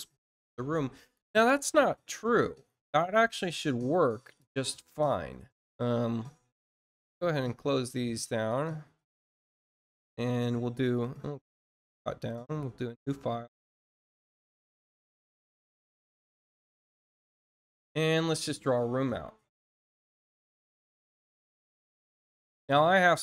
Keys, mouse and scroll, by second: 4.2 click, 5.1 middle click, 8.4 click, 11.8 click, 15.4 click, 19.6 click.